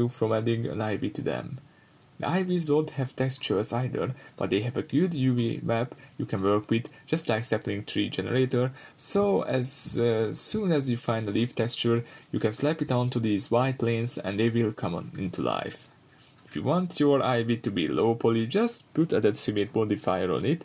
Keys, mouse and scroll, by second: 1.7 shift+right click, 2.8 click, 3.7-13.8 middle drag, 5.5-5.8 scroll up 2, 7.5-7.8 scroll down 2, 9.9 ctrl+z, 11.1-11.4 scroll down 1, 13.8-17.5 drag, 17.5 shift+right click, 18.8-19.4 drag, 20.1-20.6 middle drag.